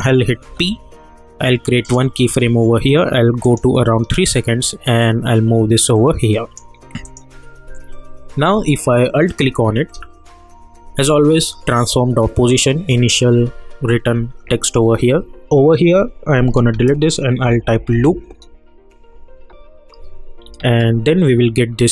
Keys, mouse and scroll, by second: 0.4 p, 1.8-7.0 drag, 9.3 alt+click, 17.2-18.4 typing, 20.4 typing.